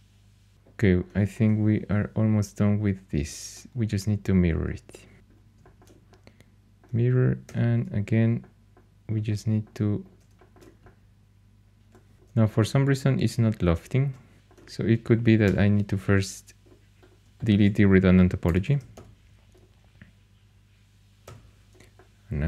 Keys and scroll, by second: 4.9-5.7 typing, 7.4 3, 12.1 3, 14.4 Up, 14.4 ⟲, 15.4 4, 18.2-19.4 typing, 21.2 3.